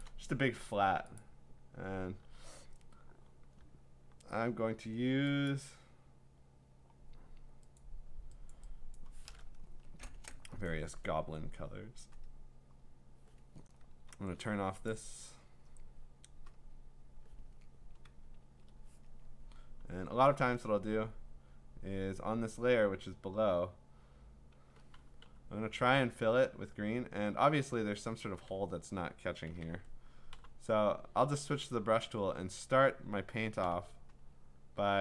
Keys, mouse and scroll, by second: 0.0 click, 1.2 click, 2.2 g, 5.6 click, 7.8 click, 8.5 click, 9.0 click, 9.7 Return, 12.3 click, 13.0 click, 14.1 ctrl+z, 14.9 click, 16.6 click, 18.4 ctrl+z, 20.0 b, 21.1 click, 23.0 click, 23.6 click, 25.2 g, 25.7 click, 29.4 click, 29.5 ctrl+z, 30.3 b, 31.7 click, 33.6 g, 34.2-35.0 click.